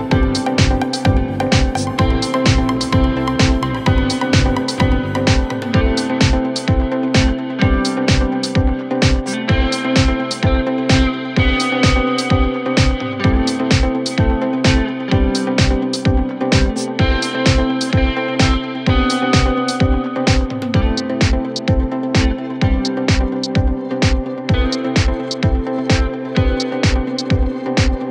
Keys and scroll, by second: 9.9 ctrl+z, 16.1 ctrl+z, 18.4 ctrl+z, 20.0 ctrl+z.